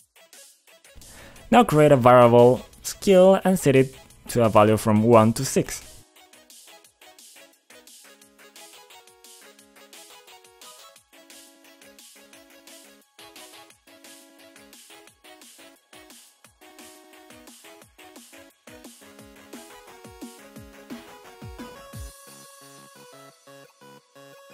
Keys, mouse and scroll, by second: 1.7 click, 3.5 click, 4.6 click, 7.7-8.6 typing, 10.5 click, 11.5 click, 13.7 click, 14.8 click, 16.7 click, 17.5 2, 17.8 Return, 19.3 click, 20.9 click, 21.0 click.